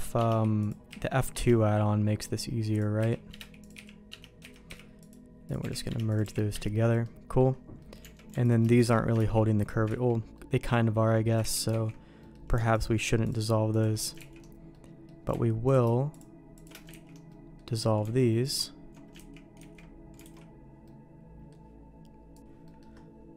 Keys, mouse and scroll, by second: 0.6 click, 0.9 f, 2.7 click, 3.0-6.2 typing, 3.6 click, 5.4 click, 6.1 click, 7.0 middle click, 7.7 middle click, 8.0 Tab, 8.4 alt+click, 8.8 alt+shift+click, 9.1 ctrl+x, 9.8 ctrl+z, 10.3 middle click, 11.7 ctrl+x, 11.7 ctrl+z, 12.2 middle click, 14.3 ctrl+x, 14.7 middle click, 16.6 click, 16.9 ctrl+x, 17.2 middle click, 18.4 alt+click, 19.6 ctrl+x, 19.6 ctrl+z, 20.2 alt+a, 20.8 middle click, 22.6 middle click.